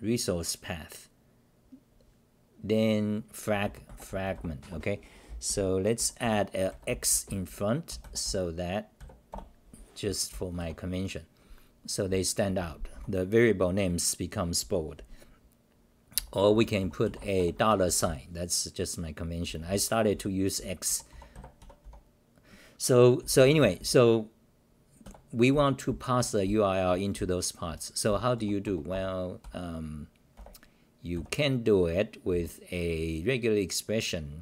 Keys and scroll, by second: 3.6 u, 4.6 Home, 5.0-7.9 typing, 9.3 Return, 10.3 t, 10.6 ,, 12.1-12.6 c, 12.9 t, 15.9-21.8 typing, 23.2 t, 23.4 t, 23.5 t, 23.7 t, 24.8-31.1 typing, 28.6 Return, 28.9 Return, 32.3 t.